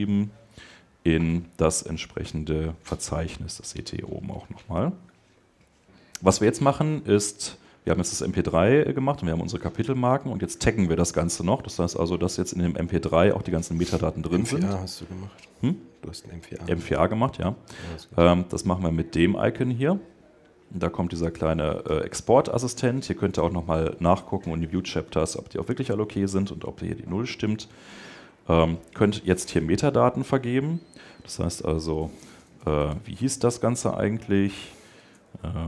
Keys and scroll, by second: 33.2 shift+Tab.